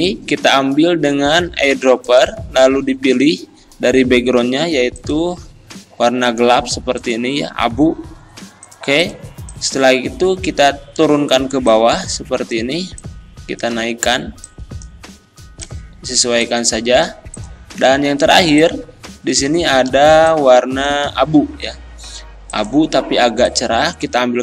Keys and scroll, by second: 20.1 z.